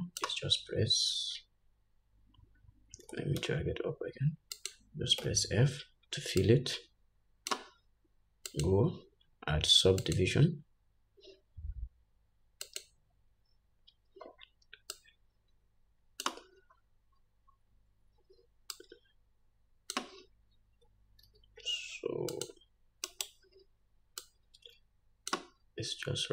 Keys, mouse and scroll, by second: 3.5 g, 5.5 f, 6.8-26.3 drag, 17.2-18.9 scroll down 2, 18.9 scroll down 1, 21.6 ctrl+r, 26.0-26.3 scroll down 2.